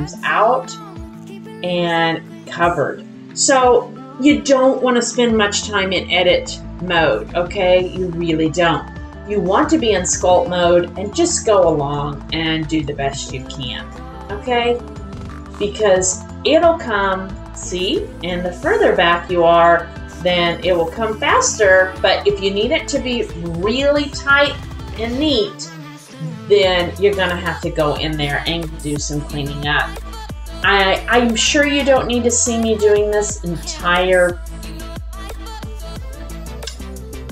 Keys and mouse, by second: 0.3 click, 1.2 middle click, 4.7-5.8 middle drag, 5.8-7.6 drag, 5.8-7.6 right drag, 8.6-9.3 drag, 11.0-12.8 drag, 13.8 click, 14.9 click, 16.2-19.3 drag, 19.6 click, 20.1 click, 20.4-22.7 drag, 23.3 click, 23.9-25.7 drag, 26.4 click, 30.6 click, 31.4 middle click, 32.5 click, 33.1 click, 34.1 click, 34.8 middle click, 35.9-37.3 drag.